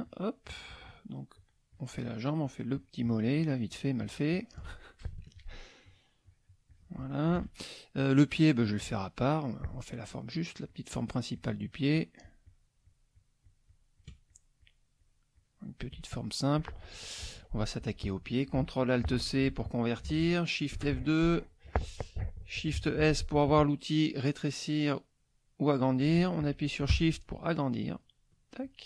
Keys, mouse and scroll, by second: 0.0 shift+click, 0.4 shift+click, 0.8 shift+click, 1.3-2.3 shift+drag, 2.4-4.6 shift+drag, 5.8 shift+click, 6.2 shift+click, 7.7 shift+click, 9.3 click, 9.9 shift+click, 10.3-12.8 shift+drag, 16.1 shift+click, 19.2 ctrl+alt+c, 22.7 shift+s, 27.4 shift+click, 27.9 shift+click, 28.6 shift+click.